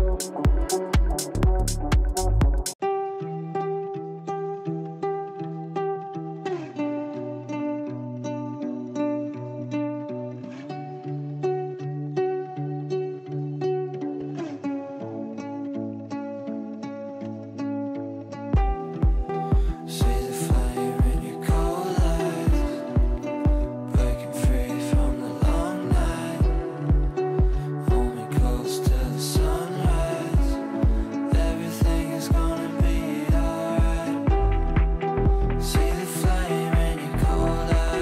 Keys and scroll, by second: 9.3 Escape, 10.5 Delete, 18.4 g.